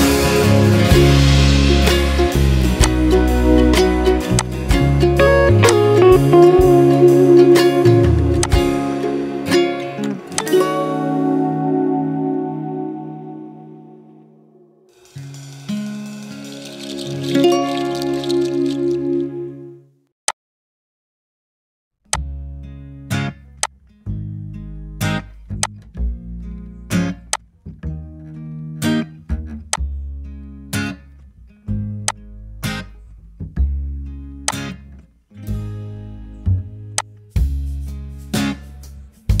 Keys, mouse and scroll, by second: 12.7-13.6 typing, 14.7 space, 15.8-16.6 typing, 17.7-18.4 typing.